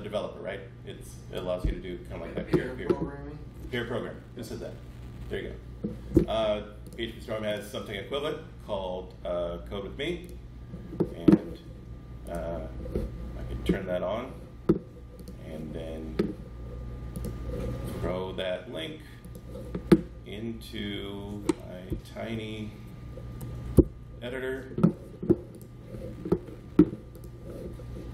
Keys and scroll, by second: 21.8 Page_Up, 23.6 ctrl+Up, 23.7 ctrl+Page_Down, 25.6 Page_Up, 25.6 ctrl+Page_Down.